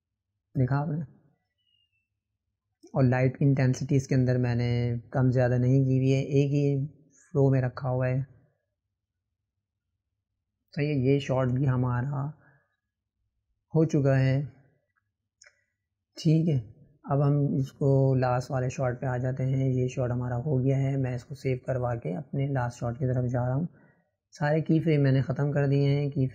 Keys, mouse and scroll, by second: 1.4-2.5 right drag, 2.5 click, 4.9 click, 6.9 click, 11.4 click, 14.3 click, 14.9-16.3 middle drag, 16.3 click, 17.4 click, 18.5-19.7 shift+middle drag, 19.7 click, 22.4 click, 24.9-26.3 right drag.